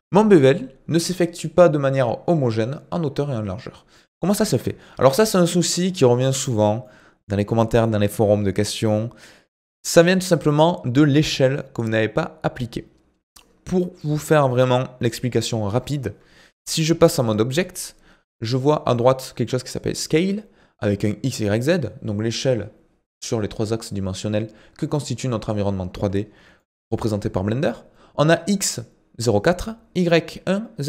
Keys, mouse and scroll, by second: 4.9 ctrl+z, 6.3-6.8 scroll down 1, 6.8 middle click, 7.6-10.7 scroll down 2, 15.7 Tab, 16.9-19.9 scroll down 1, 26.6-29.7 shift+middle drag.